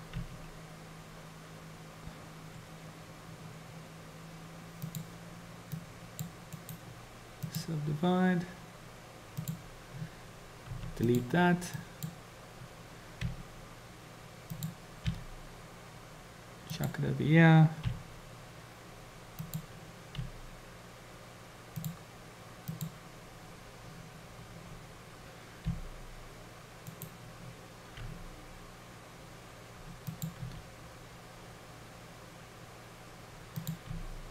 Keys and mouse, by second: 0.2 r, 5.9 click, 6.6-7.7 right drag, 9.3 click, 10.7 x, 11.9 click, 13.3 r, 15.2 g, 17.9 r, 20.3 g, 22.7 click, 25.7 g, 28.0 r, 30.4 s, 33.9 g.